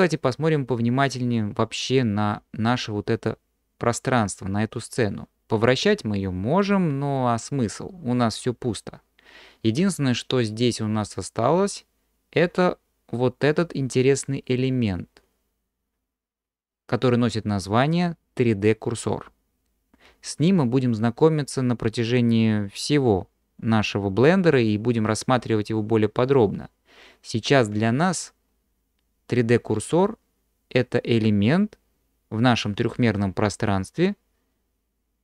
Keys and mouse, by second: 5.7-8.4 middle drag.